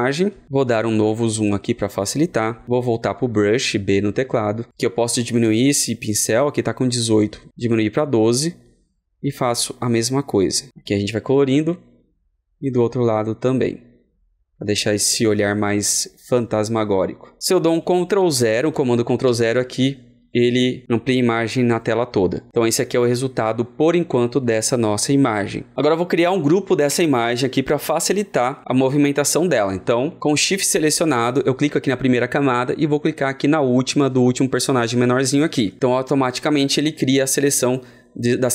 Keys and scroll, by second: 19.2 ctrl+0, 30.6 ctrl+0.